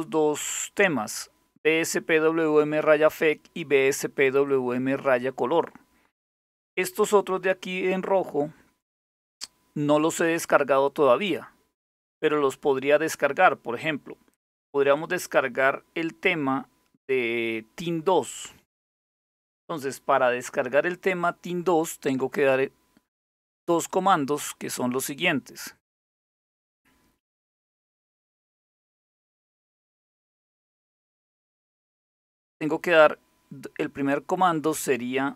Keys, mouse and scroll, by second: 3.6-6.3 drag, 7.3-11.0 drag, 14.5 click, 23.5 click, 24.8-26.0 scroll down 2, 26.0-27.6 scroll down 1, 27.6-31.5 scroll down 1, 31.5 click, 33.7-34.9 scroll down 2, 34.9 click.